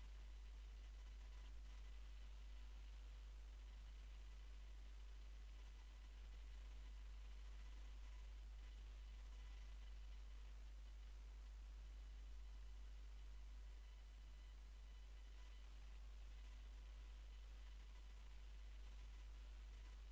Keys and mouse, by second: 1.1 x, 4.2 right click, 4.5 right click, 6.1 w, 9.4 x, 10.6-12.2 middle drag, 12.5-15.9 right drag, 14.2 x, 17.5 click, 18.2 w, 18.9-20.1 drag.